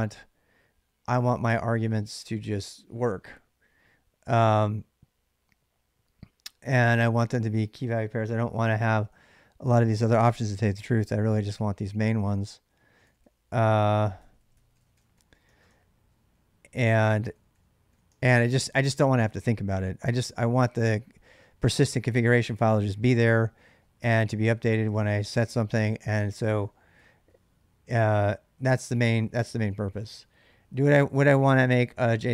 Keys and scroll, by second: 8.5-11.1 typing, 11.9 ctrl+[, 11.9 ctrl+j, 12.6-18.1 typing, 26.8 k, 27.0 k, 27.1 k, 28.0 j, 30.5-30.9 j, 32.0 k.